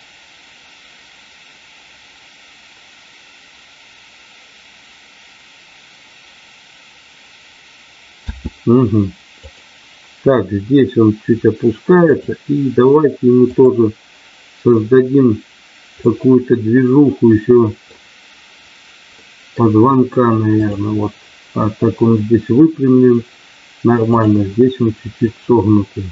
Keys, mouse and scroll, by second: 8.2 space, 9.3 click, 12.0 click, 13.5 click, 16.0-17.8 middle drag, 19.3 middle click, 20.6 click, 24.1 click.